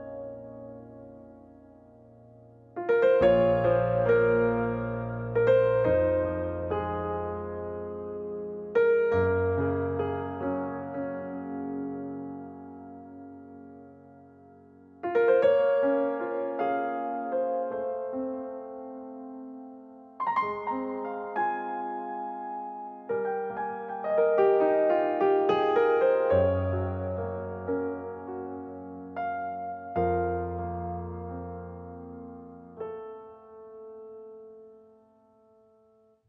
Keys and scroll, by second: 3.6 Return, 17.6 5, 18.2 Return.